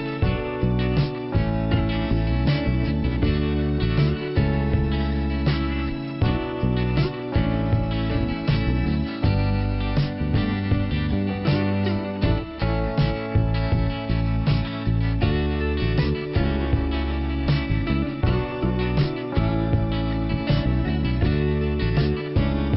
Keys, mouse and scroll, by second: 0.7 middle click, 2.7 click, 2.8 click, 6.5 middle click, 7.3-7.8 scroll down 1, 10.2 click, 10.3 click, 12.9 right click, 13.8 click, 14.0 click, 15.2 click, 16.0 click, 16.0 click, 16.3 click, 16.3 click, 17.2 click, 19.0 click, 21.1 click.